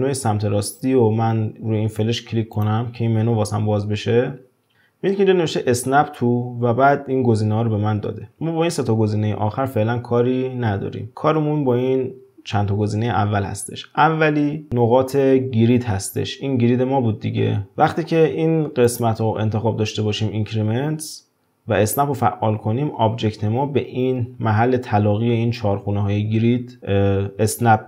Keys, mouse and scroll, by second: 2.5-5.2 drag, 18.8-21.9 drag.